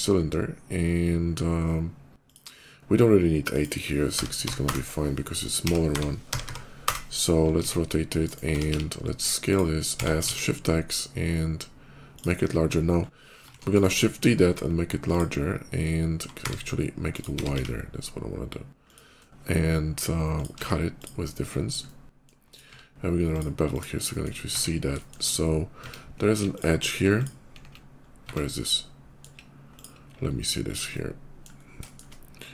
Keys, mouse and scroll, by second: 2.1 click, 3.3 click, 4.0 6, 4.4 0, 4.5 Return, 5.5 r, 5.8 y, 6.1 9, 6.3 0, 6.7 Return, 7.4 s, 8.1 right click, 8.5 x, 8.6 s, 9.3 click, 9.8 s, 10.2 shift+x, 11.3 s, 12.0 click, 12.1 middle click, 12.4 middle click, 13.3 shift+d, 14.2 s, 14.9 click, 16.9 click, 17.3 x, 17.4 s, 18.7 click, 20.2 shift+click, 20.4 q, 20.7 click, 21.5 middle click, 22.2 click, 23.0 click, 23.5 click, 23.9 middle click, 24.2 Tab, 24.8 shift+middle click, 25.5 Tab, 26.4 click, 27.0 click, 27.8 alt+middle click, 28.0 Tab, 28.3 middle click, 29.6 click, 29.9 /, 30.7 middle click, 31.4 scroll up 1, 31.7 shift+middle click, 32.3 shift+click.